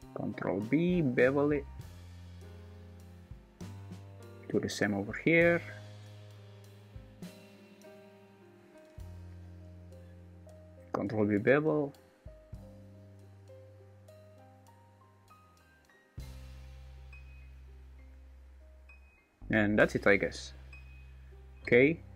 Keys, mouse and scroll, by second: 4.6 ctrl+r, 5.7 ctrl+b, 9.3 ctrl+r, 10.5 ctrl+b, 18.0 Tab, 19.8 right click, 21.1 Tab.